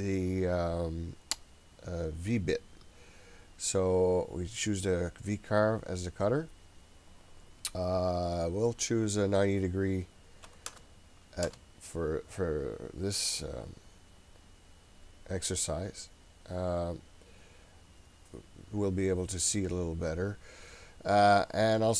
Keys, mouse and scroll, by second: 1.9-3.3 scroll up 2, 3.3-5.2 scroll up 2, 5.2-5.6 scroll up 1, 8.4-12.2 drag, 20.4-21.1 scroll up 3, 21.1-21.9 scroll up 4.